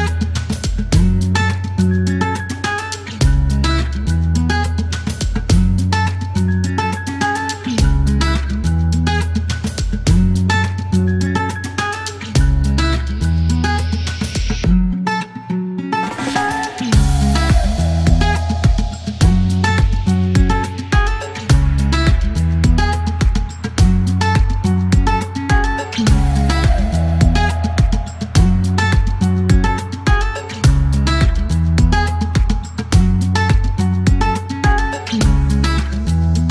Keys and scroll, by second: 3.2 shift+k, 3.6 space, 4.1 space, 4.3 e, 13.3 typing, 14.5-17.4 typing, 22.3 alt+m, 22.3 alt+o, 23.7 alt+q, 28.4 space, 30.3 space.